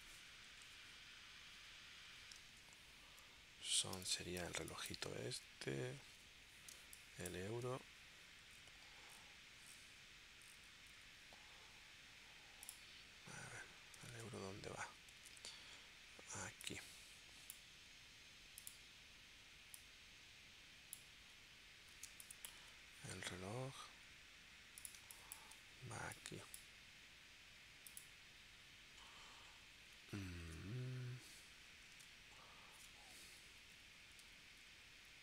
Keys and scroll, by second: 4.0 space, 6.1 super+Tab, 6.8 space, 14.1 super+Tab, 15.2 super+Tab, 21.4 l, 22.1 space, 25.0 space, 30.4 super+Tab, 32.0 super+Tab, 33.5 Down.